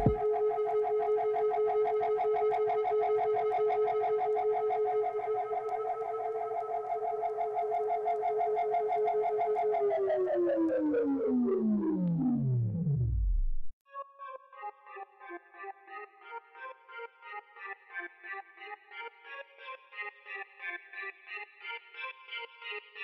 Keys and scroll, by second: 0.8 g, 5.7 z, 7.7 shift+z, 8.3 Tab, 10.5 alt+a, 17.8 /, 21.0 g, 21.3 shift+z.